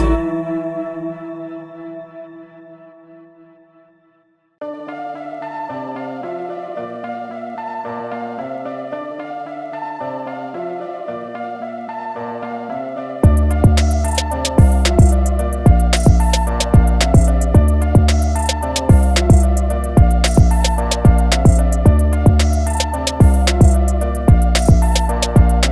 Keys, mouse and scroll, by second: 0.5 click, 1.7 ctrl+a, 3.0 shift+m, 6.3 click, 17.0 click, 23.6 Escape, 24.6 ctrl+a, 25.4 shift+m.